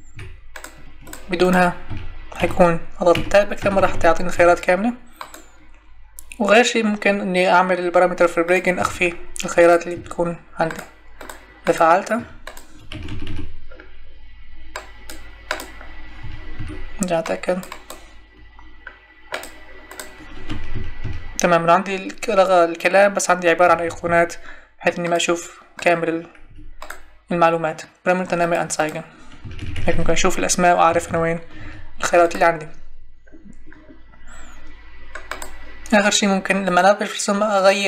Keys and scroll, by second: 1.9 Tab, 8.8 Escape, 12.1 Escape, 16.2 Escape, 20.5 Tab, 23.7 Tab, 26.5 Escape, 29.4 Tab.